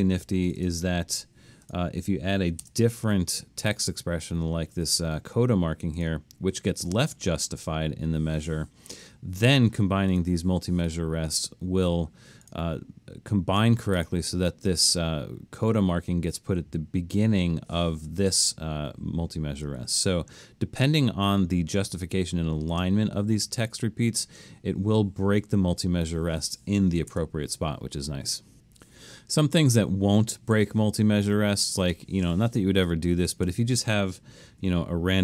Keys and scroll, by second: 1.2 BackSpace, 2.6 Return, 8.6 Escape, 19.8 super+z, 27.1 BackSpace, 34.7 1.